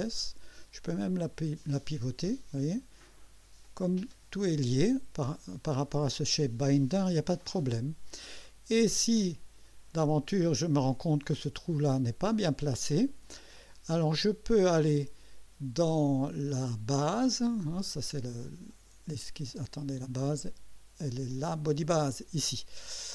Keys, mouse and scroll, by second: 1.2-2.6 drag, 3.6 click, 7.5 click, 8.4 right click, 9.2 click, 18.7 click, 19.1 space, 20.3 click, 22.1 click.